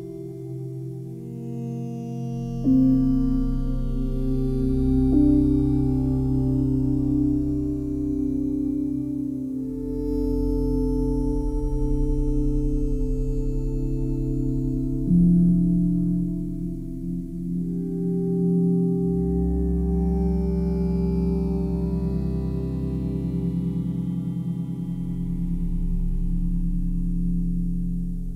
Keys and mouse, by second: 2.0 1, 2.4-3.6 ctrl+alt+drag, 4.5 alt+shift+click, 5.1 ctrl+alt+click, 5.5 alt+shift+click, 7.4 click, 8.5 click, 9.7 click, 11.3 click, 11.6 click, 13.2-14.0 drag, 16.0 click, 16.6 click, 17.5-17.9 drag, 19.7 click, 23.1 click, 23.5 click, 25.4 click, 25.8 click.